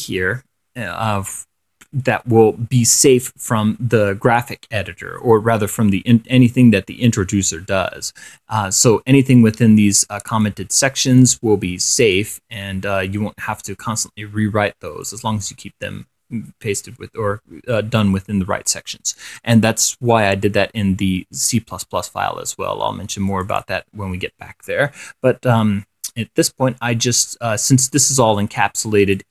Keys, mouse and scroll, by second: 3.0-3.8 scroll up 4, 4.1 scroll down 2, 9.6-10.9 drag, 10.9-11.3 scroll, 11.3 click, 12.3 click, 13.8-14.3 scroll down 1, 15.3 click, 23.5 click.